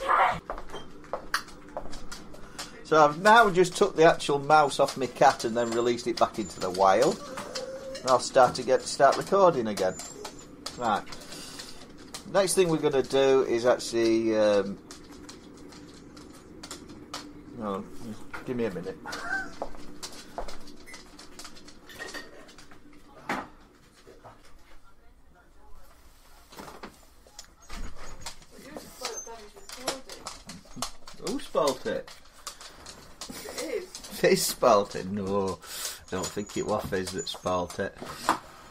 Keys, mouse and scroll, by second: 36.0 middle click, 36.4 scroll, 37.2-38.7 scroll.